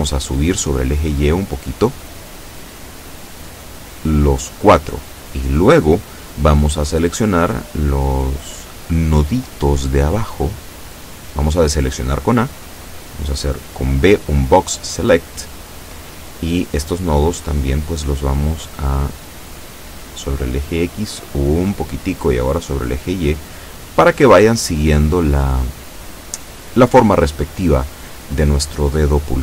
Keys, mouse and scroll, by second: 1.6-9.0 drag, 10.8 a, 11.7 b, 13.2-16.2 drag, 18.2-21.8 drag, 23.5-29.4 drag.